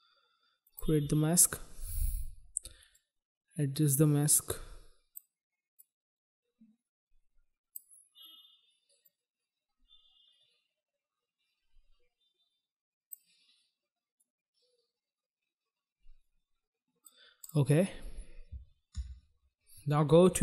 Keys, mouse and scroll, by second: 0.5 shift+click, 2.8 click, 5.5 click, 9.0 click, 14.0 click, 17.4 click, 17.5 click, 18.9 ctrl+z.